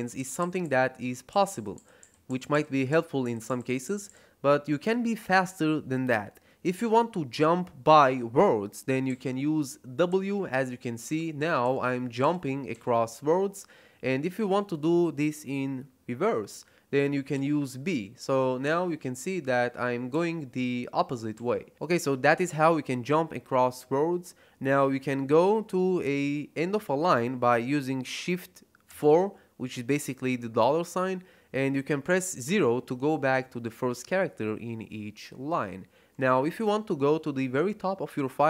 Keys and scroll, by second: 9.0-12.6 typing, 17.2 b, 18.5 b, 20.0 b, 21.2 b, 28.8 shift+4, 32.3 0.